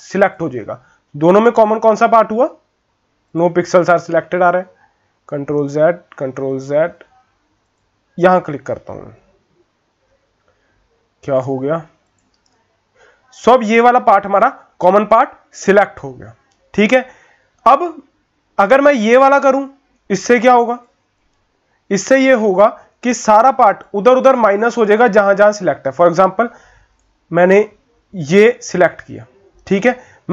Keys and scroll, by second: 5.1 ctrl+z, 6.3 ctrl+z, 9.7 ctrl+z.